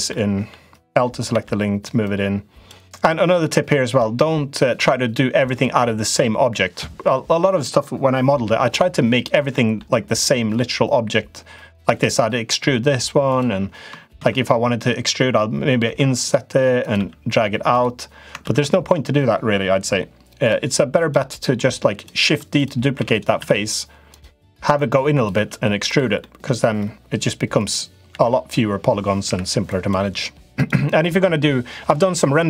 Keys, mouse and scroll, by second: 0.0 middle click, 1.1 l, 1.8 click, 3.2 click, 4.5 click, 9.2 middle click, 9.9 click, 12.3 e, 13.9 ctrl+z, 15.6 i, 16.7 e, 18.2 ctrl+z, 18.3 ctrl+z, 20.2 click, 20.7 click, 22.3 click, 22.7 shift+d, 23.1 s, 24.5 click, 25.1 e, 26.1 middle click, 27.8 l, 29.0 Delete, 30.3 click.